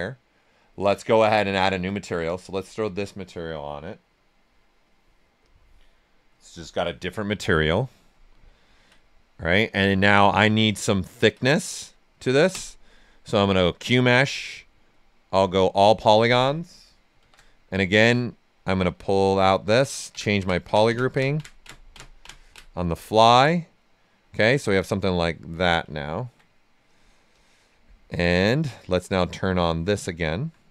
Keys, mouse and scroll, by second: 2.2 click, 5.4 click, 7.3 right click, 11.0 ctrl+right click, 12.5 space, 14.9 click, 15.2 space, 17.0 space, 17.1 shift+f, 17.4 right click, 18.4-22.8 drag, 22.8 right click, 23.4 right click, 25.2 click, 25.9 ctrl+right click, 27.3 click, 28.4 click, 30.0 alt+right click.